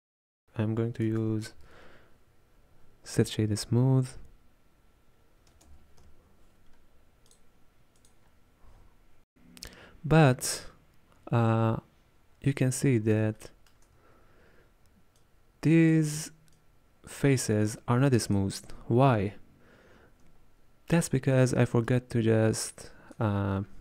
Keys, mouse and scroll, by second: 9.4-10.5 middle drag, 10.5-12.4 scroll down 3, 12.4-13.4 scroll up 3, 13.4-15.2 shift+middle drag, 15.2-23.2 drag.